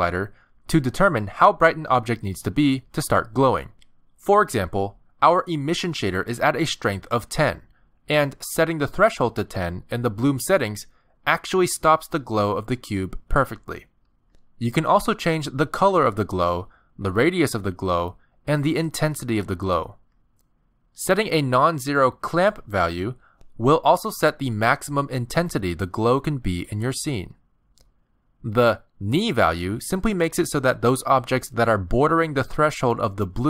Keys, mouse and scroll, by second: 0.7 click, 8.6 click, 9.6 click, 12.2 middle click, 13.1 click, 14.0 click, 15.2 click, 17.4 click, 19.9 click, 21.7 click, 24.5 click, 27.4 click, 30.4-31.0 scroll up 1, 31.1 middle click, 32.8 click.